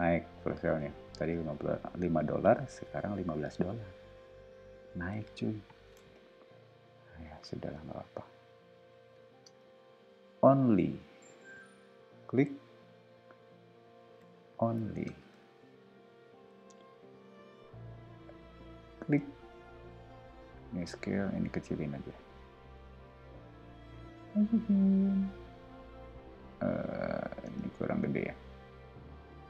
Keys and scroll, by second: 2.6 s, 6.3 m, 9.4 space, 14.0 super+a, 14.4-15.8 typing, 20.1 s, 22.7 m, 27.4 space.